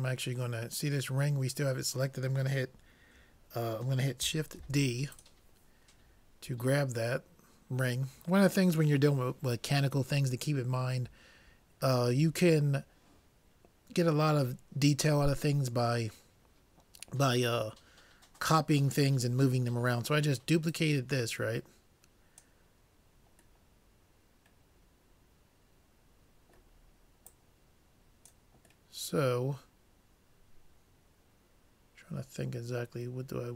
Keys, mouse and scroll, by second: 4.7 shift+d, 5.2-7.0 drag, 20.7-22.6 drag, 23.7-25.7 middle drag, 27.3-28.9 drag, 28.9-30.9 middle drag.